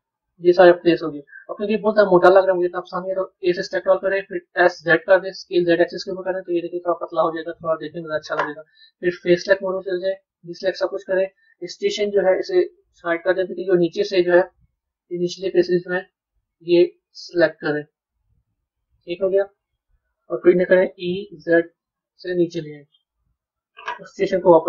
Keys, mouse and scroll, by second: 1.0 scroll down 3, 1.6 middle click, 9.3 click, 10.6-12.5 middle drag, 12.5 click, 13.0-14.8 middle drag, 14.8 click, 15.9 shift+click, 18.1-20.8 middle drag, 23.3 KP_3.